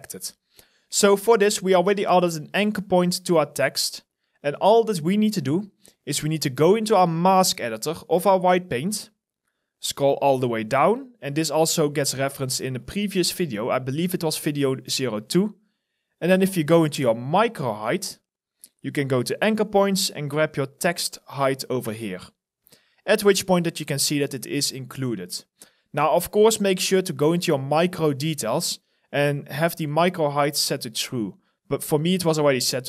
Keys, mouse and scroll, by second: 1.1-3.4 scroll down 1, 9.0-11.2 scroll down 1, 23.0 alt+right click, 23.6 alt+click, 24.7-26.4 scroll.